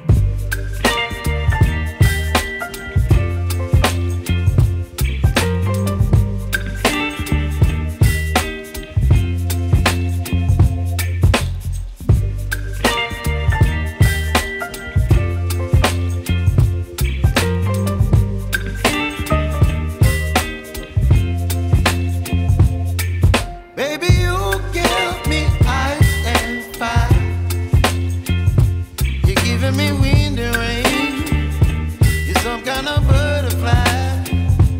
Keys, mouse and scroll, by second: 4.9-11.8 drag, 12.3 scroll down 1, 13.1 scroll down 4, 13.7-15.7 middle drag, 15.7 shift+a, 21.9 shift+a, 25.3-28.0 drag, 28.0-29.9 scroll up 2, 29.9-33.2 scroll up 5, 33.2-34.1 middle drag, 34.1-34.7 drag.